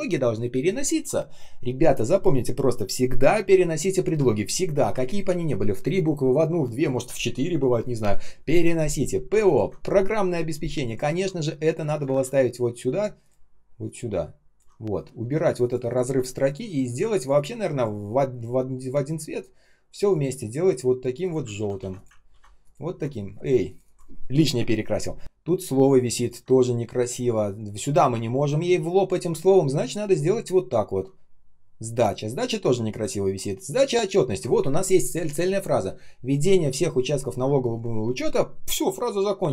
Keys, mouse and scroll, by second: 9.4 ctrl+click, 11.9 ctrl+alt+space, 16.0 Delete, 17.1 ctrl+click, 17.2 ctrl+click, 21.5 ctrl+ф, 21.7 ctrl+c, 22.2 ctrl+м, 25.2-25.7 ctrl+scroll up 1, 25.9 ctrl+scroll down 1, 26.1 ctrl+click.